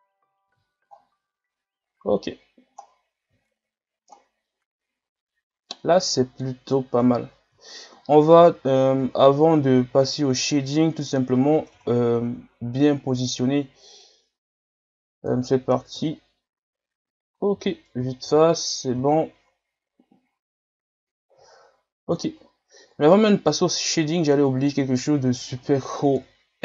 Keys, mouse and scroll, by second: 0.1 scroll up 2, 0.4 a, 0.9-1.8 scroll up 6, 1.8 scroll down 6, 2.5 scroll up 2, 2.8 scroll down 3, 3.5 shift+scroll up 1, 4.1-7.0 middle drag, 7.0 KP_3, 7.7-8.0 shift+scroll down 3, 8.0 scroll up 4, 8.5-9.0 shift+scroll down 10, 9.2-10.1 scroll up 1, 10.1 right click, 11.8 Tab, 13.2-16.0 drag, 16.0 KP_1, 17.6 a, 17.9 Tab, 18.2 a, 18.5 scroll down 5, 19.0-20.1 shift+scroll up 7, 20.1 scroll up 3, 21.6 shift+scroll down 5, 22.2-22.5 shift+scroll down 3, 22.5 scroll up 3, 23.2-26.1 middle drag, 26.1 KP_1.